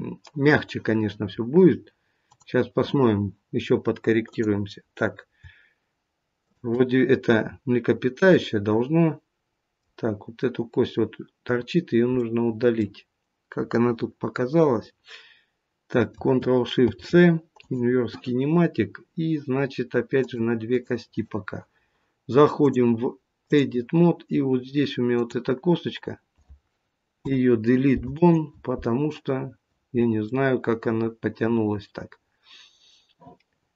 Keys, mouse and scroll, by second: 2.1 click, 4.2 click, 6.3 shift+click, 7.2 shift+click, 8.3 middle click, 12.1 middle click, 16.7 ctrl+shift+c, 20.1 click, 20.6 click, 24.3 click, 24.3-25.0 scroll up 1, 25.0 click, 25.0-25.6 scroll up 1, 27.1 Delete, 29.3-30.2 scroll down 2, 30.2 middle click.